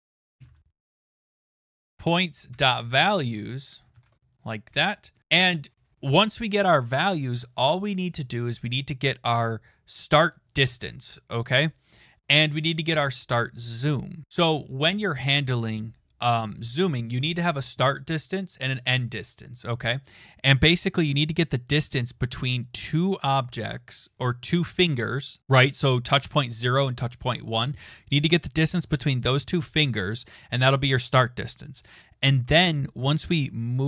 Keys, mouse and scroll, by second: 1.8 Return, 2.3-3.8 typing, 4.8 Return, 5.0-5.8 typing.